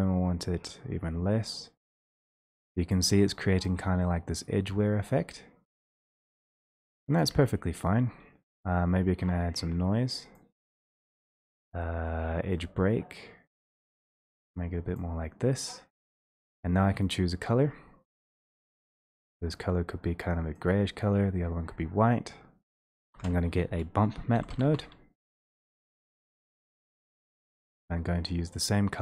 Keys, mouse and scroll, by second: 2.9 shift+click, 10.3 click, 12.1 click, 14.9 click, 16.3 click, 22.7 click, 23.0 click, 23.2 alt+space, 24.3-24.6 typing, 26.1 Return, 27.5 click, 27.8 scroll, 28.4-29.0 scroll.